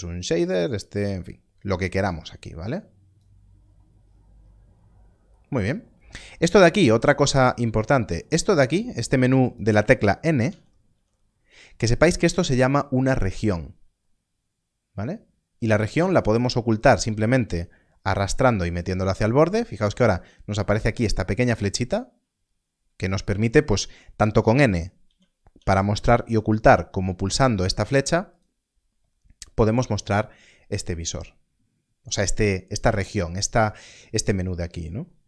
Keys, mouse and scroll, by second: 2.4 click, 3.5-4.7 scroll up 1, 4.7 middle click, 6.8 click, 10.4 n, 15.9 click, 24.2 click, 28.2 n, 28.3 click.